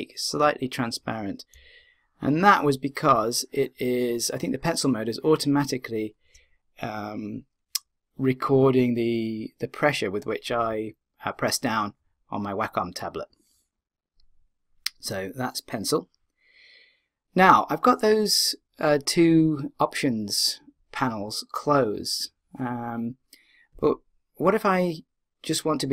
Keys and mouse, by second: 1.8-6.0 middle drag.